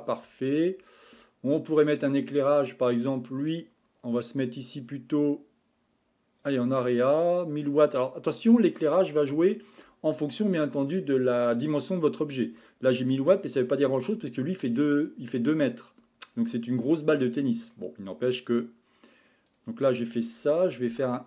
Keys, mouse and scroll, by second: 0.6 scroll down 6, 1.2-1.9 middle drag, 1.9-3.1 scroll down 4, 3.1 click, 4.8 click, 6.4 click, 8.1-12.4 middle drag, 14.1 click, 16.3 scroll up 6, 17.2 scroll down 3, 17.7-19.5 middle drag, 19.5 click, 20.9 s.